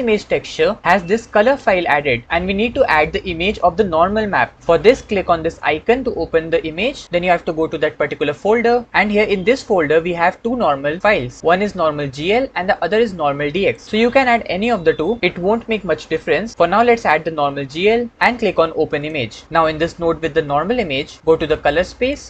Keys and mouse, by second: 22.0-22.2 middle drag.